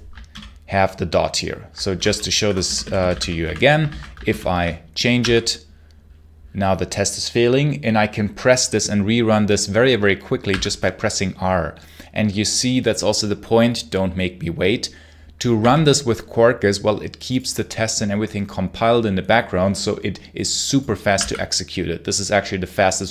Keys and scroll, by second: 0.2 super+l, 1.5-3.8 typing, 4.1 super+h, 5.0 r, 10.3 r, 15.4 r, 21.0 r.